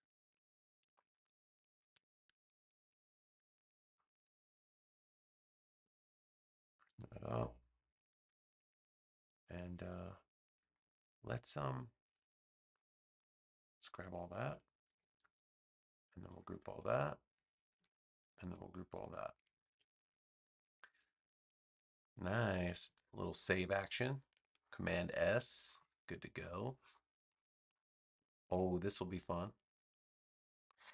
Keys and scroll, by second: 14.8 super+g, 17.7 super+g, 19.3 super+g, 22.8 super+s, 24.2 space.